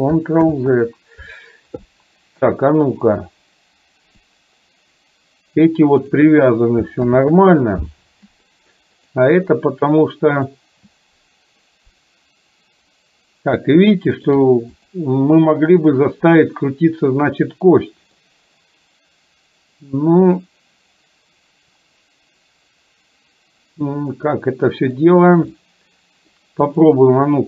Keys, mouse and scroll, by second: 0.6 ctrl+z, 3.0 click, 4.4-6.2 drag, 7.1 ctrl+z, 9.5-10.5 middle drag, 14.0 shift+middle click, 14.9 click, 18.2-25.1 middle drag, 25.6-26.4 middle drag, 26.9 click.